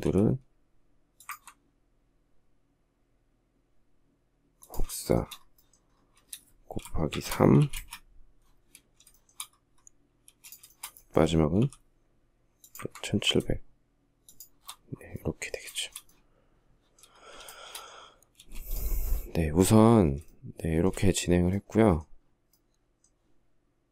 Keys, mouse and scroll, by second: 0.6 ctrl+click, 4.3 shift+middle click, 6.5-7.0 typing, 7.1 Return, 8.5 shift+middle click, 9.6 space, 11.0 m, 13.6 shift+click, 15.1 shift+middle click, 16.8 shift+middle click, 17.8 space, 19.6 shift+middle click, 23.6 shift+middle click.